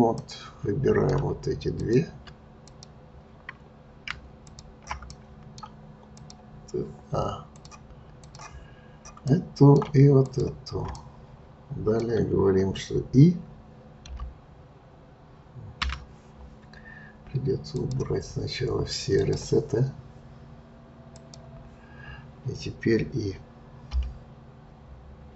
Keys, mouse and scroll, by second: 0.1-1.3 middle drag, 1.3 Tab, 1.8 click, 1.8-2.2 Tab, 2.7 click, 4.4 shift+click, 5.1-6.1 middle drag, 6.1 click, 7.5-9.2 drag, 9.2-10.2 middle drag, 10.2 shift+click, 10.9-14.0 middle drag, 17.7 click, 19.1-23.8 drag.